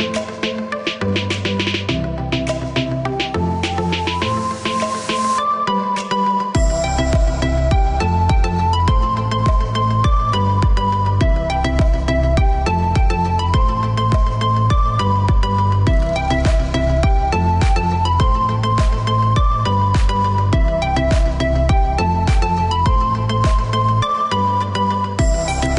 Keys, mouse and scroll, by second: 1.2 click, 2.2 middle click, 4.2 click, 6.2 space, 7.0 click, 8.2 scroll up 1, 9.8 click, 11.8 click, 14.7 click, 15.2 Escape, 16.3-17.5 scroll down 1, 17.7 click, 19.2 click, 20.2 click, 20.8 Escape, 22.3 click, 23.0-24.5 scroll up 1, 24.5 click.